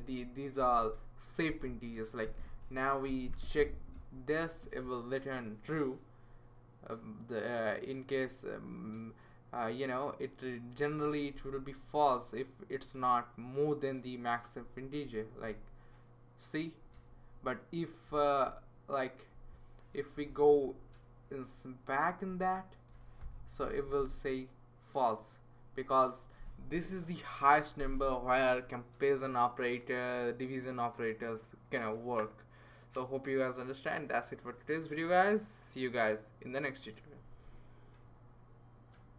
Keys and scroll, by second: 0.0-3.1 typing, 20.1 BackSpace, 20.8 -, 22.2 Down, 22.9-23.2 typing.